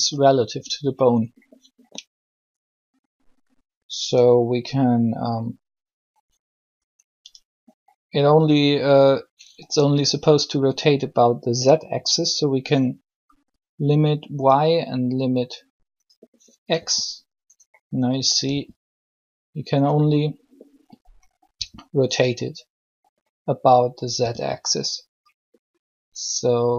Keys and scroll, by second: 0.6 r, 16.7 r, 18.5 r, 21.5 r, 24.2 r.